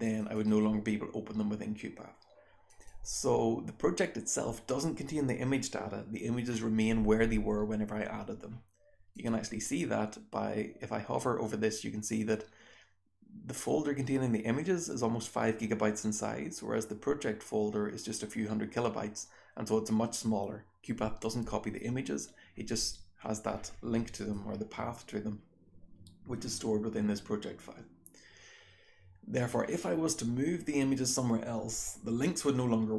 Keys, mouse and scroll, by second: 0.0 click, 0.2-0.9 drag, 2.6 click, 2.8 click.